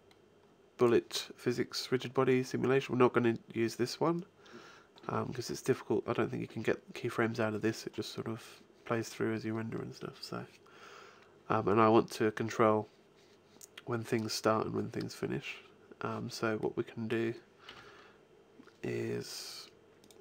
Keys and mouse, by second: 16.4 middle click, 17.5 KP_1, 19.9-20.2 drag.